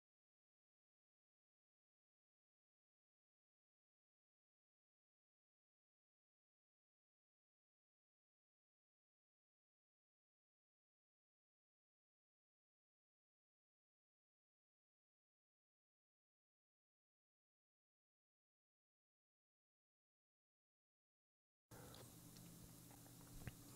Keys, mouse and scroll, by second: 0.3 1, 1.8 click, 2.3 Return, 3.2 click, 3.8 click, 3.9 click, 5.3 click, 5.7 Return, 8.0 click, 8.6 click, 8.9 click, 10.1 click, 10.5 1, 13.0 middle click, 14.0 click, 14.7 click, 14.8 click, 16.4 click, 16.7 click, 16.9 click, 18.0 6, 18.3 Return, 19.5 click, 19.7 click, 20.2 Return, 22.5 click.